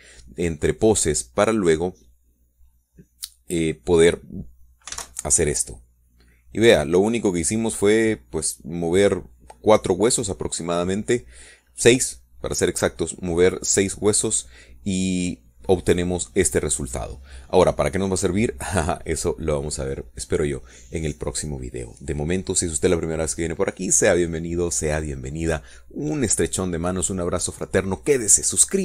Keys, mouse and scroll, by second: 6.6 alt+a.